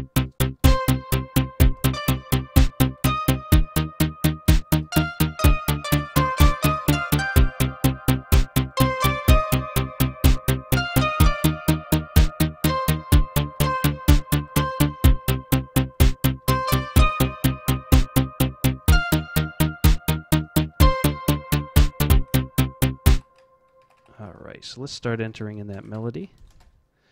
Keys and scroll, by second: 0.5 z, 1.8 x, 3.0 d, 4.6-9.2 typing, 10.7-11.4 typing, 12.6 z, 13.5 z, 16.1-17.4 typing, 18.8 v, 20.7 z, 22.0 F11, 23.1 F12, 23.8 Home, 23.9 Home, 25.2 Tab, 25.7 Tab, 25.9 Tab, 26.5 space.